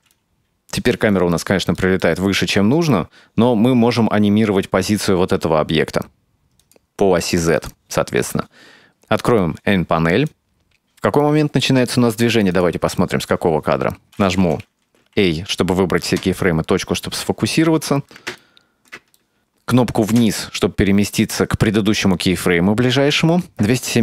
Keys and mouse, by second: 1.9 shift+middle drag, 6.6 click, 7.6 click, 10.0-11.6 drag, 12.2 click, 15.0 a, 16.2 KP_Decimal, 17.8 shift+middle click, 18.2 middle click, 18.7 shift+middle click, 19.1 shift+middle click, 20.2 Down.